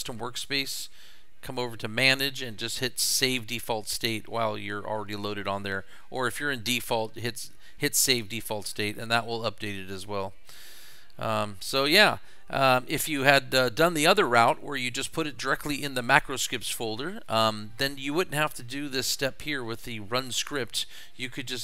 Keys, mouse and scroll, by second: 1.4 click, 8.9 click.